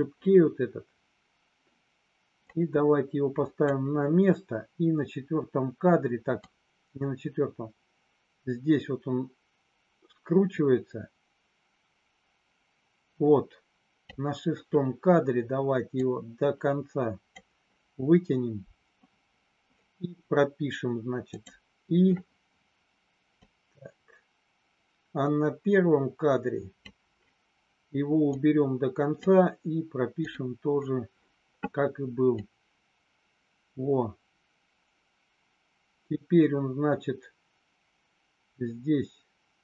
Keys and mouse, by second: 2.5-3.7 drag, 6.4-14.0 drag, 15.9-17.3 drag, 21.3 click, 23.4-26.9 drag, 28.3 click, 32.3-39.6 drag.